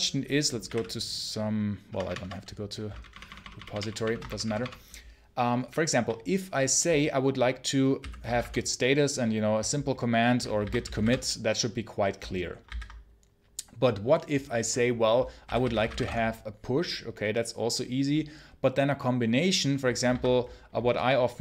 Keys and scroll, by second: 0.3-1.8 typing, 3.0 ctrl+shift+=, 4.1 ctrl+shift+BackSpace, 7.6-8.7 typing, 10.5 ctrl+c, 10.7 g, 10.9 space, 12.5 ctrl+c, 15.1-16.3 typing, 20.0 ctrl+c.